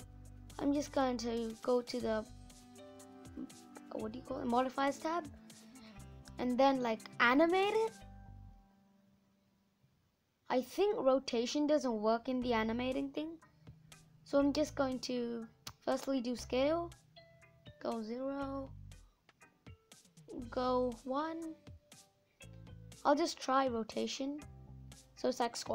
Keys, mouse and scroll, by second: 12.2 click, 14.4-18.0 drag, 19.4-22.6 drag, 23.5-25.7 drag.